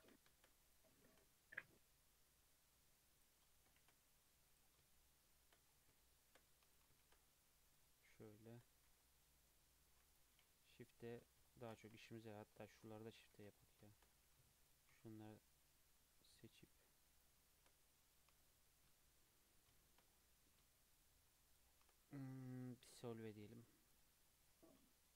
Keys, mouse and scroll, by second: 0.7 alt+click, 1.1 shift+e, 3.8 shift+e, 4.9 shift+middle click, 5.7 scroll down 1, 6.0-6.7 shift+middle drag, 6.7 alt+click, 7.0 shift+e, 8.7 Tab, 8.9 alt+z, 9.0 alt+scroll down 2, 9.2-10.1 middle drag, 10.1 click, 10.7 KP_3, 11.1-11.5 scroll down 2, 11.5 shift+middle click, 11.9 2, 12.2 Tab, 12.2-13.9 scroll up 7, 12.7-13.0 shift+middle drag, 13.4 alt+z, 13.9 shift+middle drag, 14.1 2, 14.6 alt+click, 15.3 alt+shift+click, 16.6 alt+shift+click, 17.2 alt+shift+click, 17.8 alt+middle click, 18.9 KP_3, 19.3-19.8 scroll down 2, 19.8 shift+middle drag, 20.1-21.0 scroll up 4, 21.0 alt+shift+click, 21.5 alt+shift+click, 22.5 x, 24.3-25.1 scroll down 2.